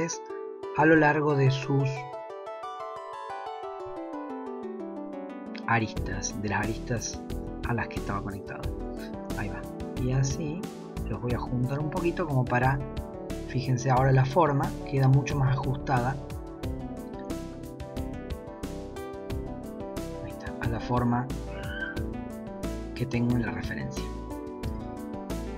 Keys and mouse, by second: 0.7 g, 3.6 g, 8.8 click, 12.6 g, 13.5 Tab, 17.4 Tab, 17.9 click, 18.7 g, 20.7 Tab, 22.0-22.4 shift+middle drag, 24.3 Tab.